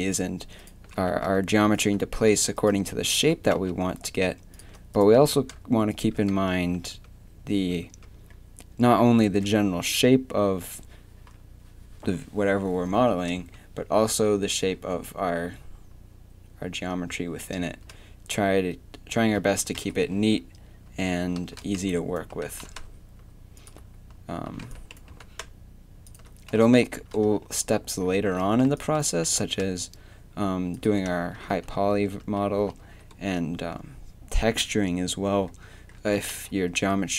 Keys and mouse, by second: 5.9 g, 6.3 z, 6.6 a, 6.9 Tab, 7.8 Tab, 9.2 Tab, 13.4 Tab, 19.8-22.3 typing, 24.3 a, 24.6 b, 25.1 g, 26.8 a, 28.7 b, 29.2 g, 31.1 Tab, 31.5 z, 32.0 Tab, 32.5 a, 32.8 z, 36.0 Tab, 36.4 z.